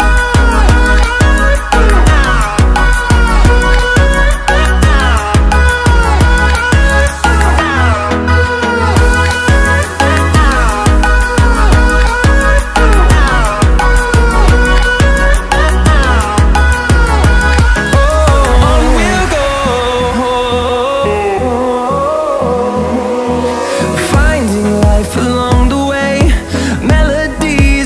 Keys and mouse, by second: 2.3 Tab, 2.7 click, 3.9 g, 5.4 z, 6.6 1, 7.1 click, 9.2 Tab, 12.6-14.2 drag, 19.9 click, 21.4 click, 25.0-27.8 drag.